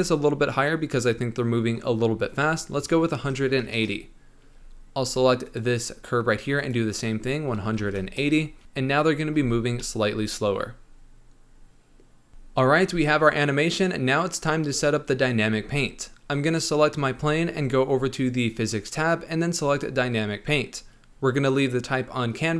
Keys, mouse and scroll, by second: 5.4 click, 6.5-9.3 drag, 9.3 space, 9.7-13.9 middle drag, 16.2 click, 18.2 click, 19.6-22.5 drag.